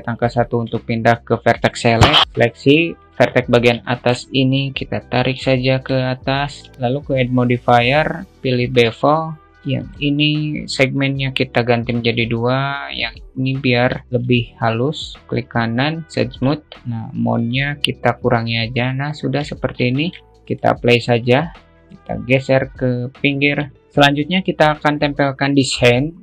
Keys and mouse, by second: 0.2 1, 0.9-3.3 shift+middle drag, 3.3 click, 4.3 shift+middle click, 5.0-6.4 drag, 6.7 alt+z, 7.8-9.0 drag, 10.4 click, 12.4-14.0 drag, 14.8 shift+middle click, 16.1-16.7 right drag, 16.8 click, 17.8 click, 19.0-20.0 alt+middle drag, 21.1-23.8 drag.